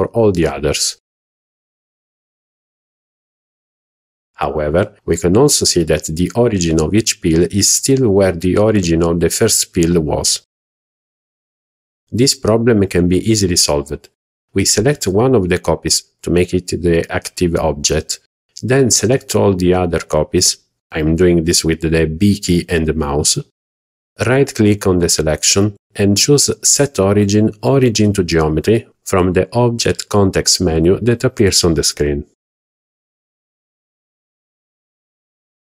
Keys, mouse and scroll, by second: 2.9 click, 3.3 click, 6.7 click, 7.2 click, 7.7 click, 8.1 click, 11.1 click, 11.4 scroll down 2, 12.0 click, 12.4-12.9 scroll down 3, 13.1-13.7 shift+middle drag, 14.1 scroll down 2, 14.7 shift+middle click, 16.4 b, 18.4 scroll up 1, 18.8 shift+middle drag, 19.2-20.2 scroll up 5, 20.5-20.8 shift+middle drag, 21.0-21.3 scroll up 1, 33.2 right click.